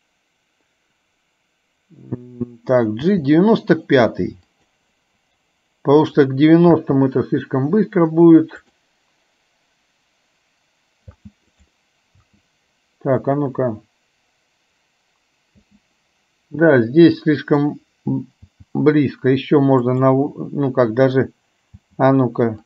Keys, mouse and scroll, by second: 6.3 click, 6.9 space, 8.8 drag, 11.3 space, 11.5 click, 12.3 space, 13.4 drag, 15.8 space, 16.8-17.6 drag, 18.6 g.